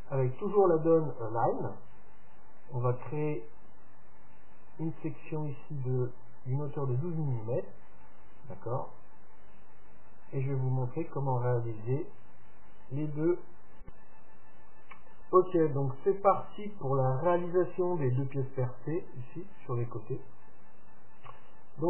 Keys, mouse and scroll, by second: 10.3-12.8 middle drag, 21.3 KP_3.